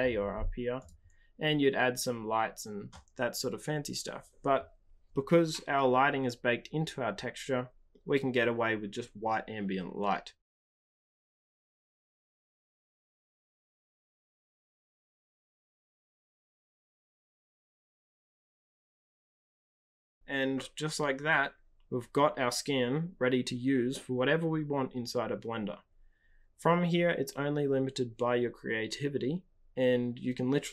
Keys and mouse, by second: 0.9-4.2 drag.